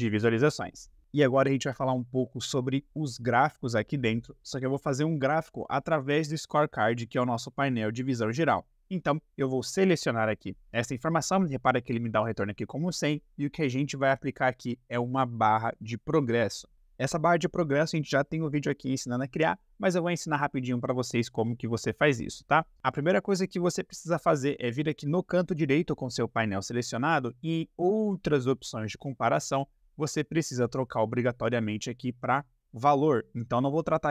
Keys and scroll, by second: 25.9 ctrl+`.